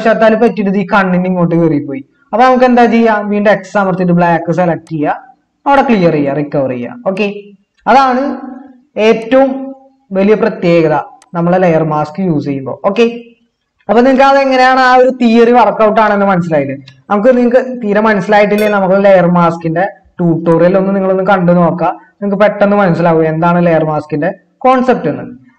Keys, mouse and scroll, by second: 3.6 typing.